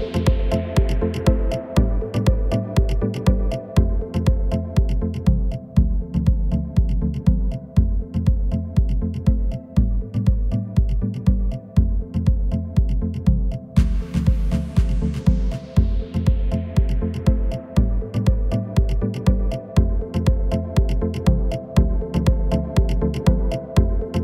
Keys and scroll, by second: 6.7 e, 7.4 Escape, 8.5 g, 14.7 s.